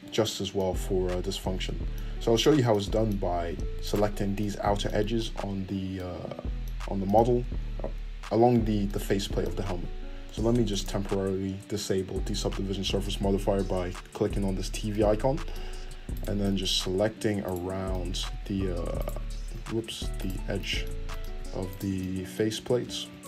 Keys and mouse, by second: 0.1 Tab, 3.8 alt+right click, 3.9-10.7 alt+middle drag, 10.7-23.2 drag, 16.1 ctrl+middle click, 16.1 ctrl+right click, 17.4 ctrl+middle click, 17.4 ctrl+right click, 18.9 alt+shift+right click, 19.7 ctrl+z, 20.1 alt+shift+right click, 21.7 alt+shift+middle click, 21.7 alt+shift+right click.